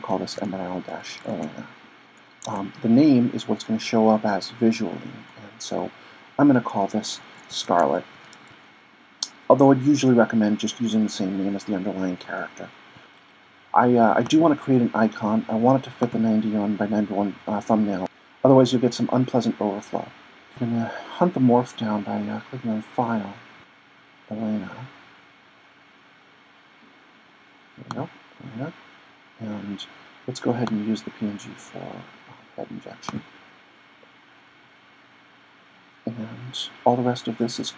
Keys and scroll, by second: 0.0-1.4 typing, 6.7-8.8 typing.